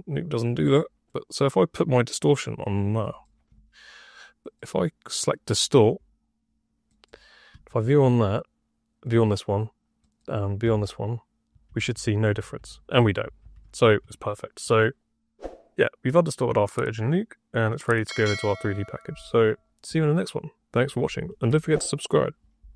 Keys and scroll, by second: 7.4 2, 10.5-14.4 typing.